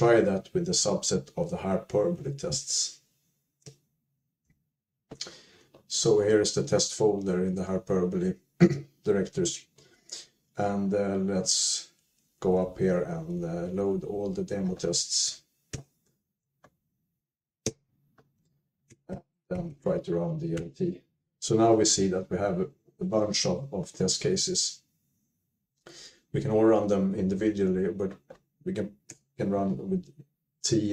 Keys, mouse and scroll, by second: 4.5 alt+x, 4.5 Return, 4.5 Down, 4.5 Up, 4.5 Tab, 4.5 click, 4.5 typing, 10.1 Up, 10.5 Up, 11.0-12.1 Up, 12.3 Up, 12.5 Up, 12.8 Up, 13.1 Up, 13.2 Up, 13.4 Up, 13.6 Up, 13.8 Up, 14.3 Up, 14.5 Up, 14.5 typing, 16.0 shift+l, 17.8 typing, 19.4 alt+x, 19.8-20.5 typing, 20.9 Return, 26.2 Down, 26.7 Down, 27.1 Up, 27.4 Up, 29.2-29.9 typing.